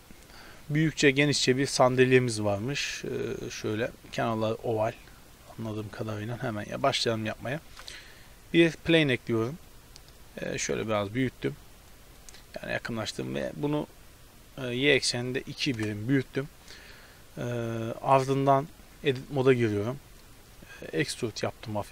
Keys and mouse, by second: 7.4 click, 7.7 shift+a, 8.0-9.0 drag, 10.7 KP_Decimal, 13.0 s, 19.0 Tab, 20.8 e.